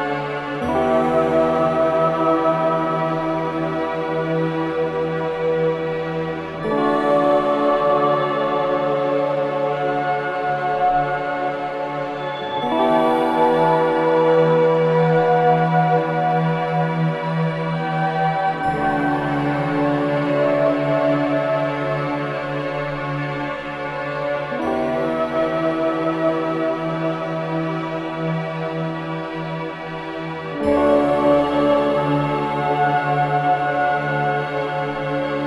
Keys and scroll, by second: 2.5 ], 3.9 ], 4.8 ], 10.4 ], 17.6 Delete, 26.6 ], 33.9 ctrl+z, 34.3 4.